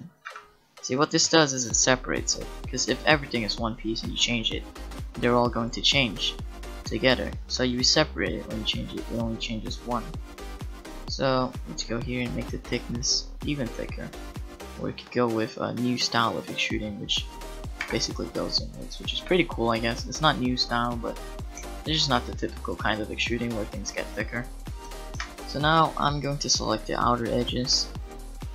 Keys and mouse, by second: 0.3 Tab, 3.9-4.9 drag, 3.9 right click, 5.3 click, 5.9 middle click, 6.7-10.5 drag, 11.0-14.1 drag, 12.2 right click, 14.1 middle click, 15.7-17.8 middle drag, 17.8 a, 17.9 middle click, 25.2 Tab.